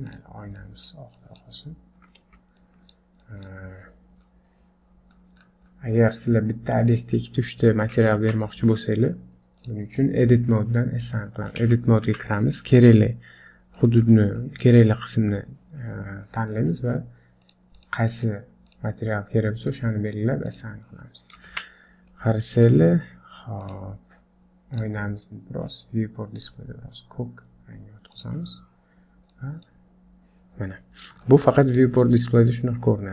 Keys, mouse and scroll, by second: 4.3-4.9 scroll up 1, 4.9 scroll down 2, 6.9 click, 6.9-7.4 scroll up 1, 7.7 scroll down 2, 8.2 Tab, 8.7-9.3 scroll up 2, 9.6 click, 11.6 Tab, 12.1 Tab, 12.8 scroll down 6, 13.0 middle click, 14.0-14.6 scroll up 5, 14.4 middle click, 17.8 click, 18.7 click, 20.5 click, 21.2 scroll up 2, 21.5 Tab, 21.8-22.4 scroll down 3, 22.1 middle click, 22.9-23.6 scroll up 1, 23.6 click, 23.6-24.3 scroll up 1, 24.8 click, 25.9-26.4 scroll down 1, 26.4 click, 30.6 scroll down 4, 30.8 middle click, 31.3 shift+middle click, 31.7 click, 32.1 middle click.